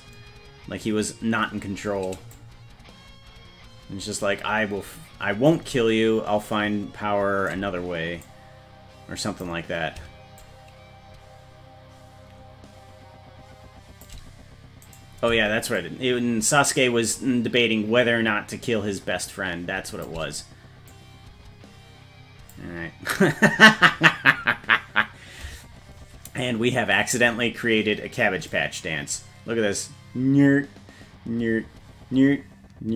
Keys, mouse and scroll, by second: 2.4-5.6 drag, 6.0-6.4 scroll down 1, 8.3-9.5 drag, 10.4-14.1 shift+drag, 14.9 right click, 15.8-20.1 shift+drag, 20.9-22.6 drag, 28.5-32.9 drag.